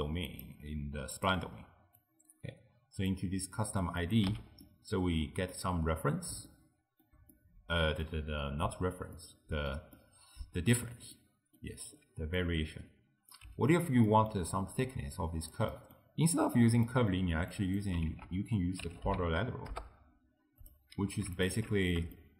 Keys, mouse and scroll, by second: 0.3-2.1 drag, 4.1 click, 4.4 x, 4.7-11.2 middle drag, 11.8-12.4 scroll down 1, 12.4 click, 13.8 g, 14.1 middle click, 14.5-15.2 scroll up 1, 15.2 click, 15.8 middle click, 16.2-16.9 scroll up 1, 16.9-17.6 middle drag, 17.6 click, 18.2 ctrl+a, 21.4 alt+shift+click, 22.2-22.3 shift+middle drag.